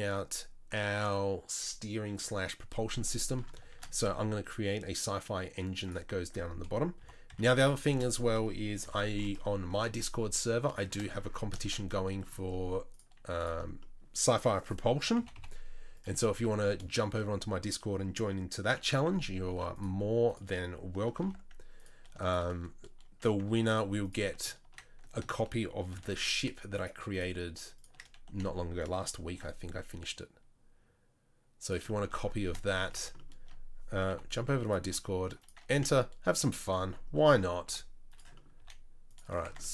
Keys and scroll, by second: 3.7 shift+a, 7.0 g, 8.8 r, 9.9 Tab, 10.2 s, 15.2 g, 19.5 ctrl+r, 21.2 ctrl+b, 23.5 ctrl+r, 26.0 ctrl+r, 28.3 s, 34.1 i, 34.8 e, 35.8 s, 37.7 i, 38.6 e, 39.5 Tab.